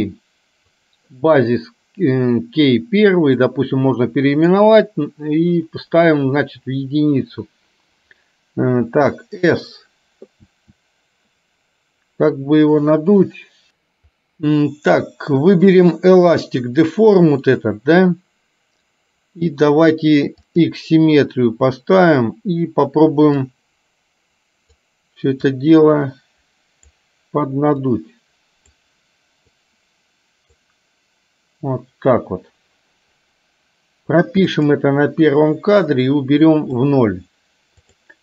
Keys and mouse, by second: 0.8 click, 3.8 click, 8.9 s, 10.6 s, 20.5 click, 23.6-24.9 drag, 25.6-27.0 drag, 28.0 click, 29.6-30.6 drag, 34.6 click, 36.0 click, 38.0 click.